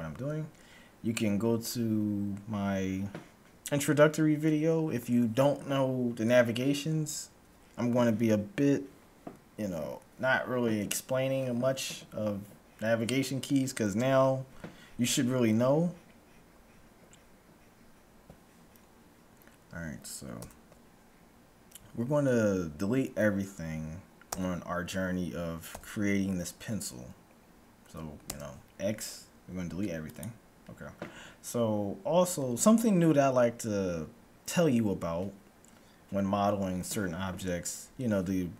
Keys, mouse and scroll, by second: 20.3 n, 24.2 a, 25.8 a, 28.3 x.